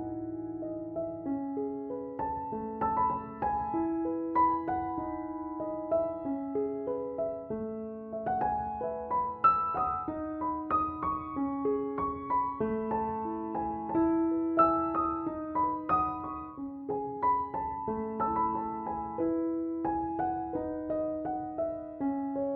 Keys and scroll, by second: 6.4-7.7 typing, 20.6-21.9 typing.